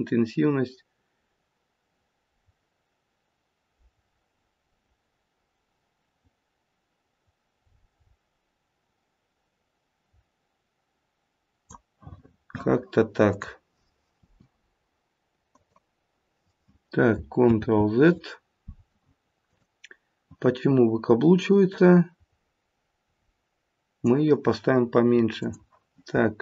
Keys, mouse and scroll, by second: 13.2 click, 14.1 r, 17.4 ctrl+z, 19.4 click, 21.6 click, 25.3 click.